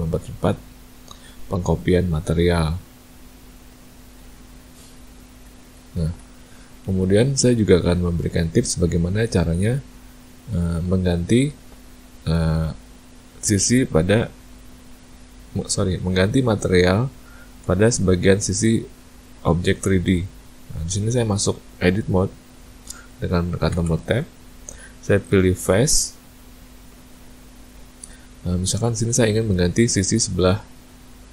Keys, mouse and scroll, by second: 5.4 ctrl+z, 5.7 ctrl+z, 6.1 ctrl+z, 6.9 middle click, 8.5 middle click, 17.5 Tab, 21.4 middle click, 23.0 Tab, 23.7 Tab, 26.7 click, 28.5 middle click.